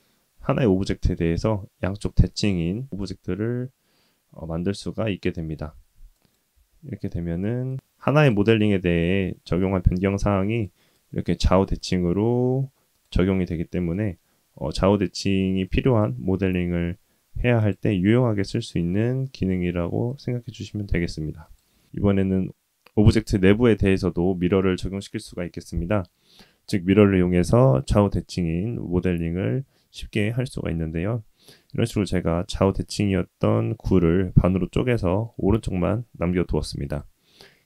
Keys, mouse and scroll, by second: 7.0 Tab, 7.4 middle click, 8.1 click, 9.6 g, 14.7 middle click, 15.7-16.7 drag, 17.0 click, 17.9 g, 19.3-21.2 middle drag, 21.2 shift+a, 22.5 middle click, 23.4-24.1 drag, 24.9 click, 25.3 Tab, 25.5 middle click, 25.7 Tab, 26.5-26.8 drag, 26.9 scroll up 2, 27.1 Tab, 27.5 KP_1, 28.2 alt+z, 28.4 click, 28.6 click, 29.1 click, 29.7 x, 30.2 Tab, 30.3-35.2 middle drag, 36.8-37.6 drag.